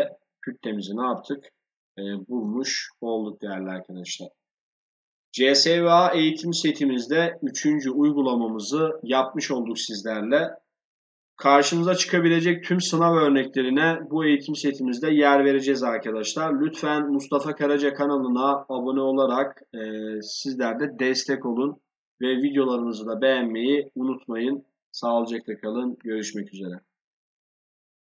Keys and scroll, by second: 2.0 ctrl+s.